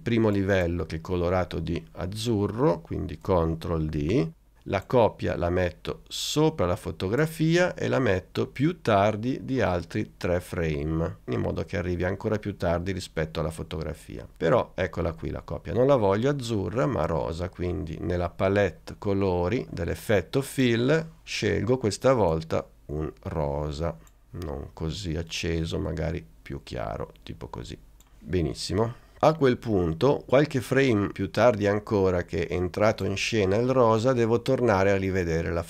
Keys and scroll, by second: 3.9 super+d.